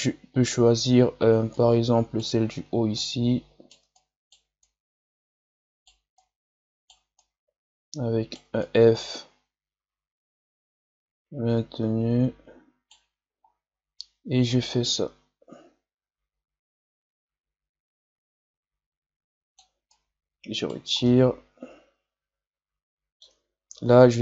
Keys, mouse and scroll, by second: 0.8-1.5 scroll up 3, 1.5 right click, 2.3 scroll up 2, 2.9-11.6 shift+right drag, 14.6-17.5 drag, 19.8-21.0 right drag, 21.0-23.7 middle drag, 23.7 ctrl+z.